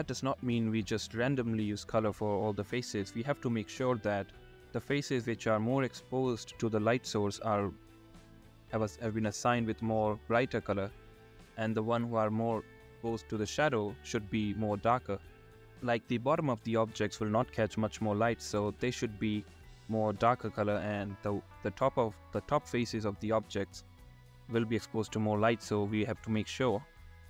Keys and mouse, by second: 0.0 middle click, 3.1 shift+middle click, 4.5 click, 5.5 click, 6.1 click, 6.2 shift+click, 6.3 click, 7.2 middle click, 7.8 shift+middle click, 8.5 shift+middle click, 9.2 middle click, 10.1 shift+click, 11.2 click, 11.5 click, 11.9 click, 12.3 middle click, 13.6 middle click, 14.0 middle click, 15.2 shift+click, 15.4 shift+click, 19.9 middle click, 20.8 middle click, 21.5 middle click, 21.6 shift+middle click, 22.8 middle click, 24.0 middle click, 24.7 middle click, 26.4 middle click, 26.7 alt+middle click, 27.1 click.